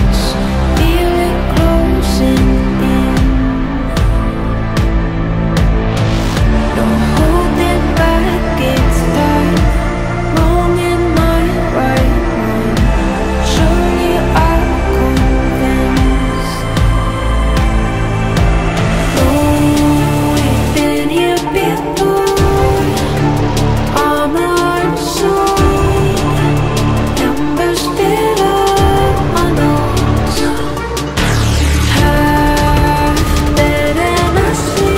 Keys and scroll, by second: 23.7 KP_Add.